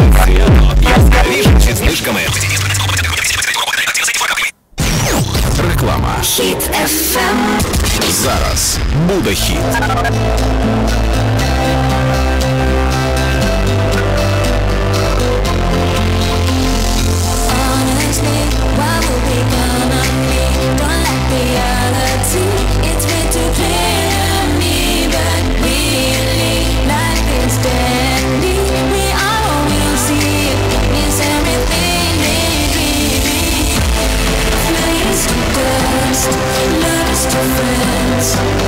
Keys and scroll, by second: 1.8 Page_Down.